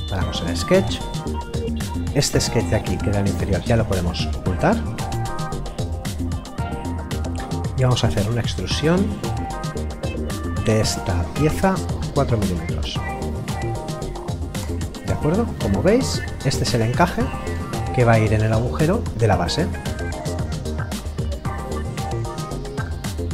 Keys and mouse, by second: 3.4 click, 4.5 middle click, 8.1 e, 9.0 click, 14.6 Return, 15.5 middle click, 20.4 click, 21.3 middle click.